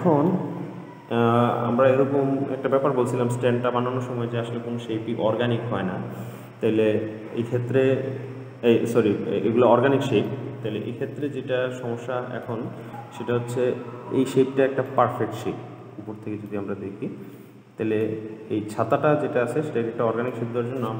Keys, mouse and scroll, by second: 7.7-9.2 scroll up 2, 9.2-10.5 scroll up 1, 10.5-15.1 middle drag, 15.2-17.1 middle drag, 17.1-17.6 scroll down 2, 17.6-18.7 middle drag, 18.7-19.3 scroll up 1, 19.3-20.9 middle drag.